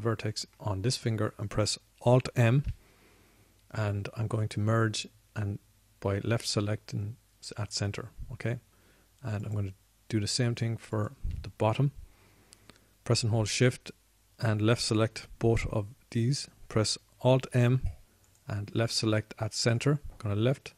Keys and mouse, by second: 1.2-3.3 middle drag, 3.9 alt+m, 18.9 alt+m.